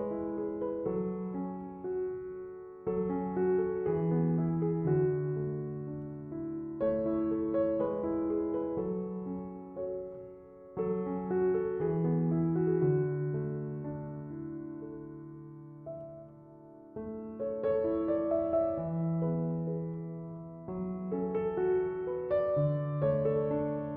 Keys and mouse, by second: 7.6 click, 14.0 click, 16.9 click, 21.8 click.